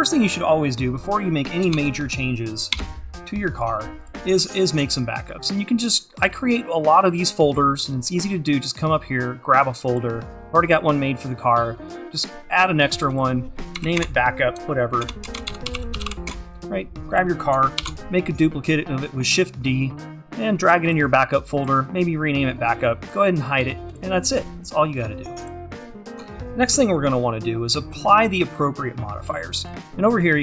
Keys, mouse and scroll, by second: 0.3-1.8 drag, 2.0 shift+c, 3.6 click, 12.3 click, 16.3 click, 23.1-26.2 drag, 26.3 shift+`.